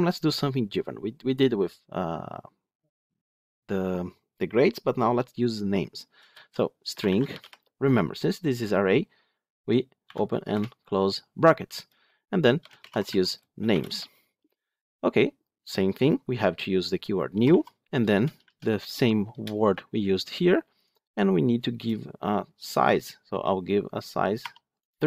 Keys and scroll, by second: 19.2 Return.